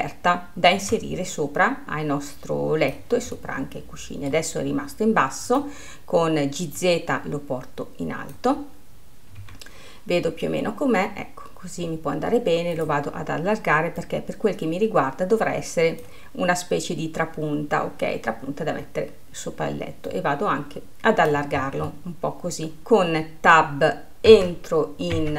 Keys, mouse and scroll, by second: 1.8 click, 3.6-5.7 middle drag, 5.7-7.2 drag, 13.1-14.5 drag, 20.4 click, 21.9-22.2 scroll, 22.2-23.4 middle drag, 24.7 Tab.